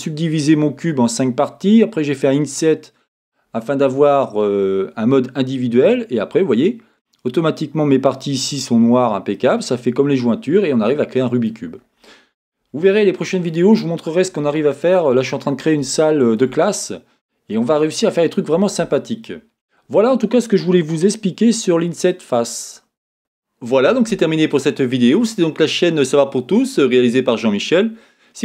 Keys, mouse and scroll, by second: 6.0-8.4 scroll up 2, 8.4-9.2 scroll up 1, 9.2 scroll down 2, 11.8-13.0 scroll down 2, 15.3-16.0 scroll down 2.